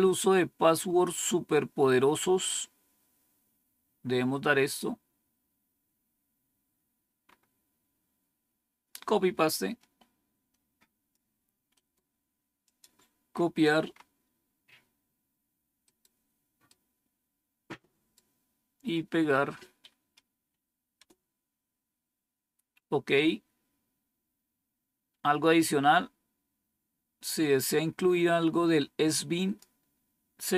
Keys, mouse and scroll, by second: 3.2 scroll down 1, 5.7 scroll down 2, 7.2-8.9 scroll up 2, 8.9-11.0 drag, 11.6 right click, 12.5 click, 13.2 scroll up 2, 14.3 scroll down 2, 15.7 right click, 16.6 right click, 17.4 right click, 20.9 Return, 23.5 scroll down 2, 27.1-29.5 drag.